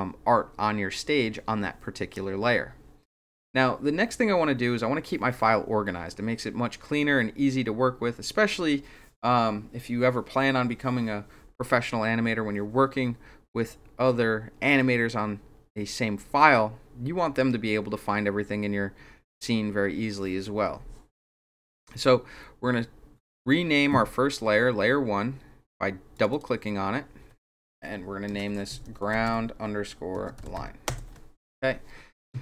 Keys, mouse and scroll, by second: 26.2 click, 26.3 click, 28.6-31.2 typing.